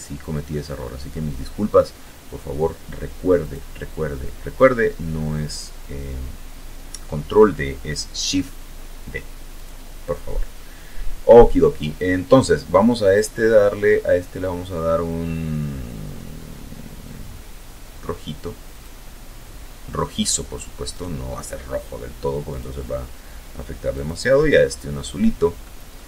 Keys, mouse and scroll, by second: 0.7 click, 6.8 click, 10.3 click, 15.9 click, 18.1 right click, 19.7 click, 21.2 click, 22.9 middle click, 24.0 KP_0, 25.9 ctrl+s.